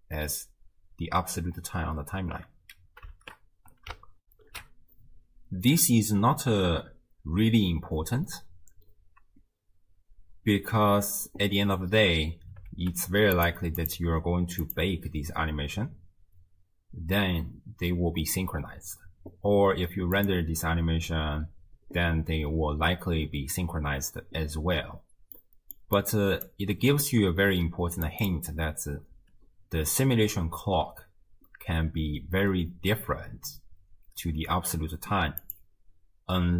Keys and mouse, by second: 3.2 shift+space, 4.4 ctrl+alt+shift+q, 10.9 space, 12.4 space, 13.5 click, 13.8 click, 20.2 click, 25.4 middle click, 26.0 click, 26.8 g, 28.3-29.3 drag, 29.3 space, 34.5 space, 35.4-36.5 drag.